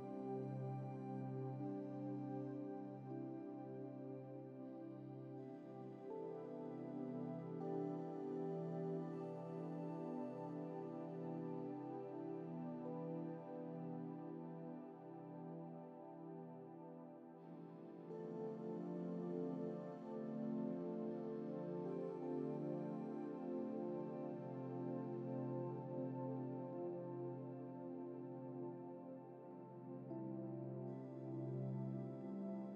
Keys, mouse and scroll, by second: 17.7 scroll down 1, 19.1-19.9 scroll up 1, 24.7-25.8 middle drag, 26.9 scroll up 1, 27.5 scroll up 1, 28.3-28.9 scroll up 2, 31.4-32.7 middle drag.